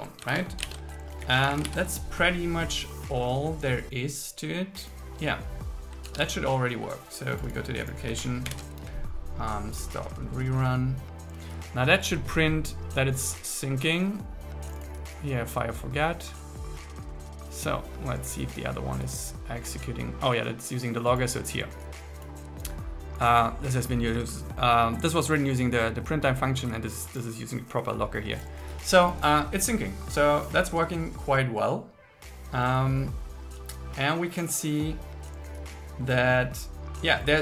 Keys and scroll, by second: 0.4 super+1, 0.8 super+1, 1.3 Down, 1.7 super+s, 6.1 super+1, 8.5 ctrl+shift+r.